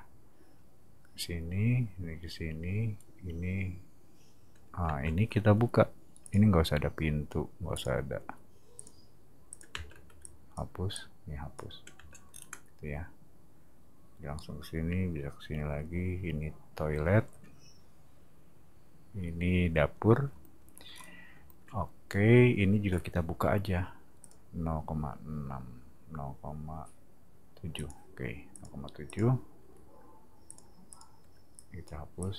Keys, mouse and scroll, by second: 4.8 space, 6.2 click, 7.7 click, 8.8 click, 9.5 click, 9.7 space, 10.0 e, 10.2 click, 10.9 click, 11.9 space, 12.3-13.4 scroll down 2, 20.9 middle click, 23.4 l, 24.2 click, 27.7 click, 28.5 click, 29.1 click, 30.5 click, 30.9 click, 31.2 e, 31.5 click, 32.2 click.